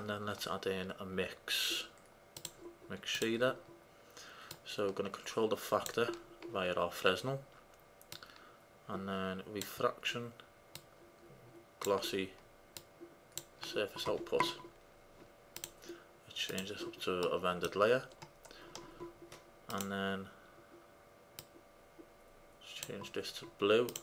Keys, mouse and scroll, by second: 4.7-6.4 drag, 8.2-9.9 drag, 10.9-12.7 drag, 12.9-13.5 drag, 13.9 click, 15.7-17.4 drag, 17.4-19.8 middle drag, 19.9-21.5 drag.